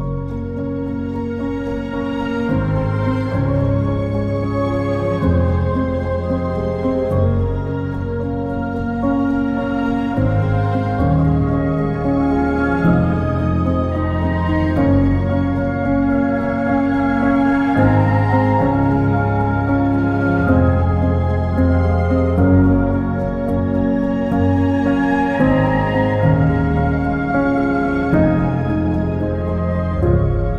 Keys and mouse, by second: 0.4 3, 0.7 click, 1.4 alt+z, 1.5 click, 4.0 shift+click, 6.6 x, 10.5 shift+click, 11.3 x, 14.1 shift+click, 16.8 shift+click, 20.0 x, 24.6 2, 26.0 g, 26.6 click, 26.8 1, 27.9 g, 28.5 click, 29.0 click, 29.6 g, 30.3 click.